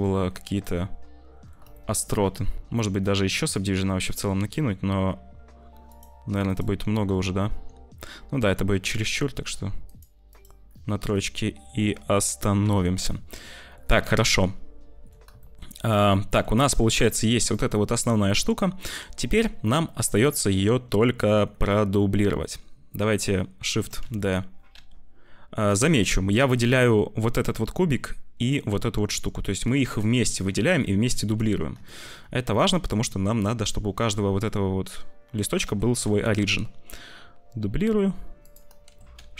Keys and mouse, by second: 0.6 click, 1.7 shift+click, 5.8 click, 6.4 click, 7.5 Tab, 8.3 Tab, 9.8 click, 10.3 click, 10.6 middle click, 10.8 Tab, 11.1 click, 11.7 middle click, 12.6 Tab, 13.3 middle click, 14.1 middle click, 15.4 shift+middle click, 15.9 ctrl+s, 16.1 middle click, 16.5 z, 17.5 middle click, 17.5-18.6 drag, 18.9 c, 20.1 click, 23.8 shift+d, 29.1 click, 29.7 ctrl+z, 31.1 `, 31.8 shift+middle click, 32.5 click, 34.2 click, 35.6 shift+d, 38.5 s, 38.9 shift+d.